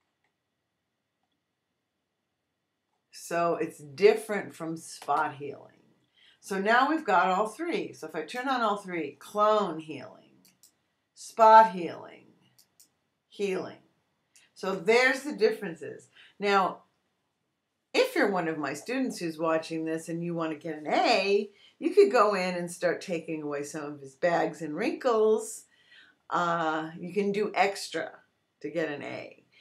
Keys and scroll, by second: 5.0 Return.